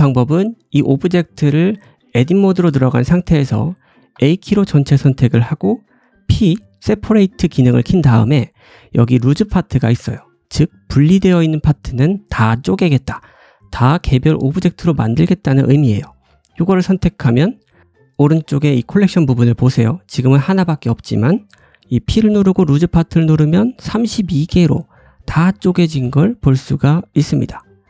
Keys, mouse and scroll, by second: 4.1-25.4 right drag, 4.1 a, 6.1 p, 21.8 p, 24.3 click, 24.5-25.5 scroll down 7, 25.8 shift+click, 26.3 shift+click, 26.8-27.3 scroll up 4, 27.2-27.8 drag, 27.6 middle click, 27.6 right click.